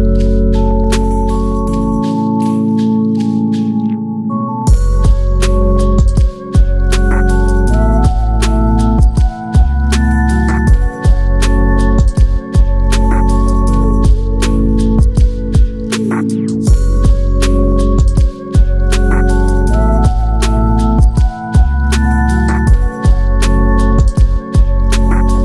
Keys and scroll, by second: 17.2 ctrl+8.